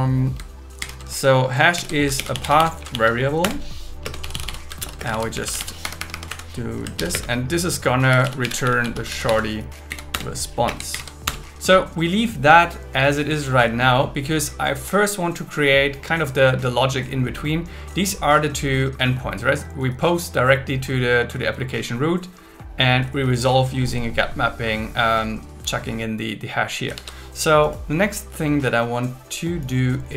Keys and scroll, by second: 0.8 shift+8, 1.8 alt+l, 1.9-5.1 typing, 3.4 Return, 4.0 Return, 5.8 Escape, 6.3 Right, 7.0 shift+., 7.1 space, 8.1 shift+s, 9.1 shift+r, 9.9 Down, 10.1 Return, 10.6 space, 10.9 alt+8, 11.2 Return, 27.3 super+1.